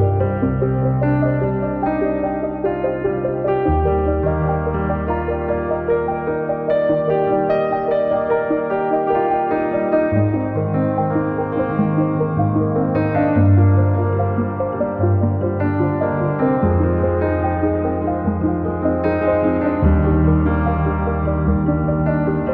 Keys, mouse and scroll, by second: 1.8 click, 3.8-4.6 drag, 5.1 click, 6.2 click, 10.5 ctrl+shift+t, 14.2-15.9 drag, 21.8 click.